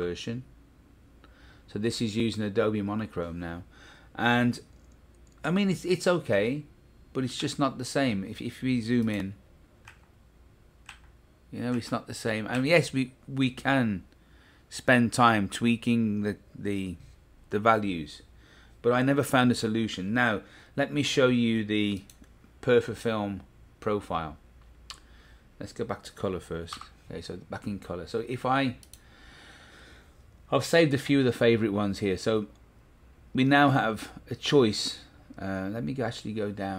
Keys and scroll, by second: 6.3 Right, 7.8 Left, 9.8 Right, 10.8 Left, 11.7 Right, 12.5 Left, 26.7 v.